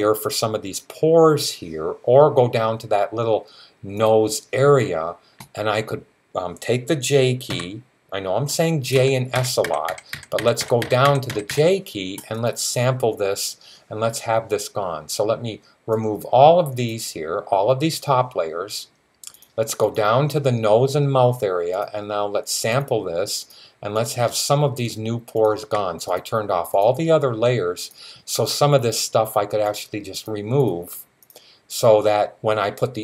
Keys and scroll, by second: 7.3 typing, 8.8-11.3 typing.